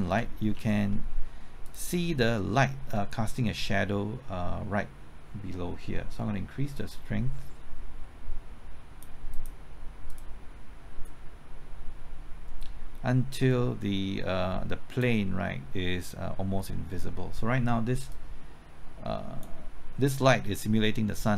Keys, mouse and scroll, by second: 0.0-0.5 typing, 1.6-20.3 drag.